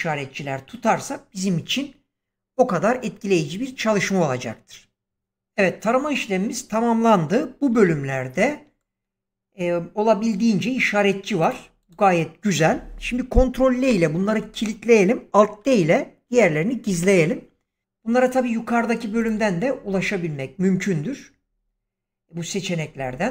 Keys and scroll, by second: 7.6 <, 13.7 ctrl+i, 16.8 alt+d.